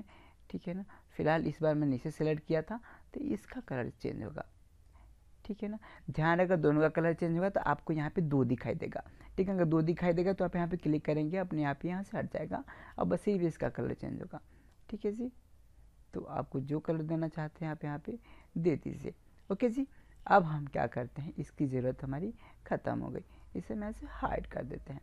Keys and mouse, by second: 0.3-1.9 drag, 3.7-5.6 drag, 14.8-16.7 drag, 22.8-24.7 drag.